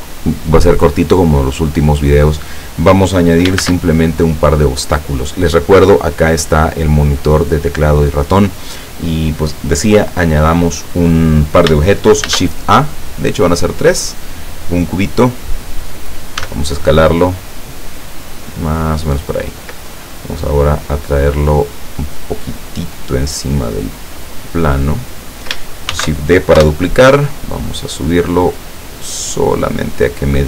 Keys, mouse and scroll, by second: 3.6 shift+a, 12.3 shift+a, 13.5 click, 14.7-15.8 drag, 16.5 s, 18.9 click, 19.9-25.1 drag, 26.0 shift+d, 26.6 Return, 27.5-30.3 drag.